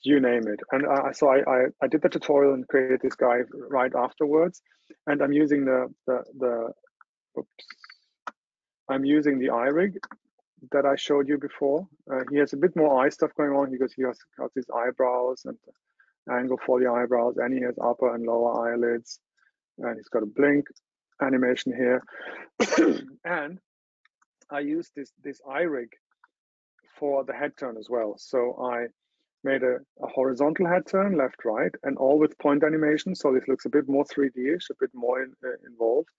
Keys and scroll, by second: 7.6 super+z.